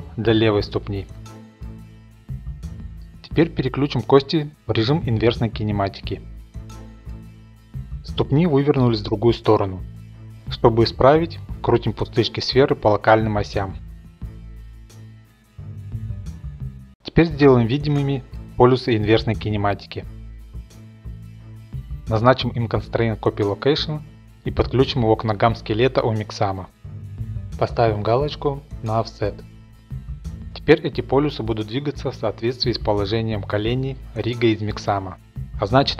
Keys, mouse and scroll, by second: 1.9-3.2 middle drag, 3.5-4.9 scroll down 5, 4.9 click, 4.9 scroll down 1, 5.1 middle click, 5.6 middle click, 6.1 click, 7.0 click, 7.5 shift+middle click, 8.2 middle click, 9.1 click, 9.2 scroll, 9.4 click, 10.4 click, 10.6 ctrl+z, 11.5 click, 11.7 click, 11.7-14.9 typing, 11.9 shift+middle click, 12.6 click, 13.3 middle click, 13.4-14.5 drag, 15.0 Return, 15.5 click, 15.8 click, 16.0 Return, 16.2-17.0 scroll, 16.6 click, 17.0 click, 17.4-17.9 scroll, 17.9 middle click, 18.4-19.0 drag, 19.0 middle click, 19.3 click, 19.8-20.5 middle drag, 20.5 click, 20.6 scroll, 21.1 drag, 21.2-21.5 middle drag, 21.5-26.6 drag, 27.7-30.1 drag, 29.9 typing, 30.2 click, 30.4-33.1 middle drag, 33.1-33.8 scroll up 3, 33.8 middle click, 33.8 click.